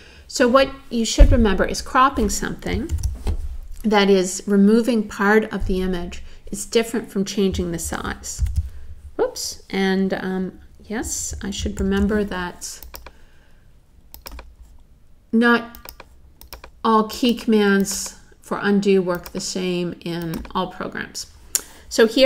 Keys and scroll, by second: 2.9 super+z, 8.4 super+z, 11.6 alt+super+z.